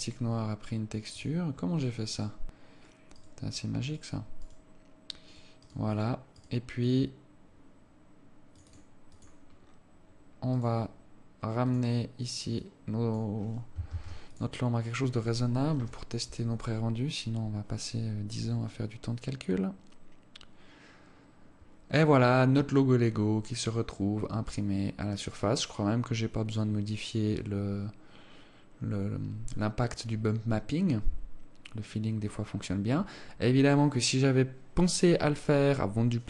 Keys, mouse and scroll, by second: 1.5 click, 2.5 right click, 3.7 right click, 4.3 right click, 4.8 right click, 5.7 right click, 6.1 right click, 6.5 right click, 6.8 right click, 8.9 click, 10.0-10.4 scroll down 4, 10.9 right click, 12.2 click, 13.1 click, 14.3 ctrl+s.